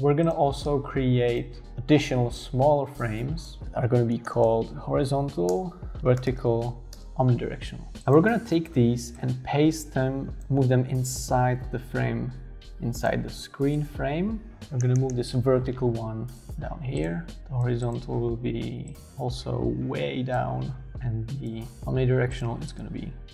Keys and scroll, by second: 3.6-7.6 typing, 14.7 shift+Down.